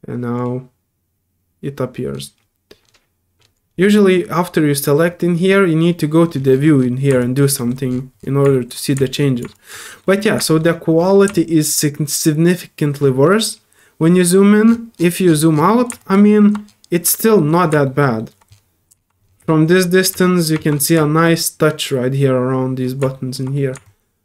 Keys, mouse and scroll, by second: 0.3 click, 2.5 scroll up 1, 2.8 scroll down 1, 3.3 scroll down 2, 6.2 middle click, 6.5 scroll down 4, 6.7 scroll up 2, 7.2 alt+click, 7.6 alt+middle click, 7.9 scroll down 1, 8.4-8.8 alt+scroll down 4, 8.5 alt+middle click, 9.0 alt+middle click, 9.5 alt+click, 9.9 alt+middle click, 10.4 alt+middle click, 11.3-13.0 alt+drag, 14.9 alt+middle click, 15.5 middle click, 16.0 click, 17.1 middle click, 17.8 middle click, 18.2 middle click, 18.9 alt+middle click, 19.4 alt+middle click, 19.5 alt+middle click, 19.8 alt+middle click, 20.2 alt+middle click, 20.7 alt+middle click, 20.9 alt+middle click, 23.1 alt+middle click, 23.5 alt+middle click, 23.8-24.2 alt+drag.